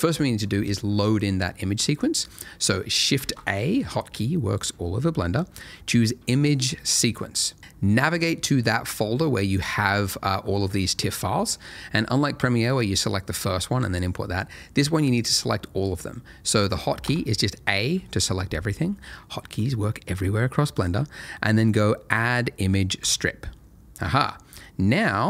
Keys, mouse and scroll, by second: 3.7 shift+a, 7.0 click, 10.4-10.9 scroll down 1, 10.9-14.5 scroll up 1, 17.0 a, 23.0 click, 24.8-25.1 scroll down 1.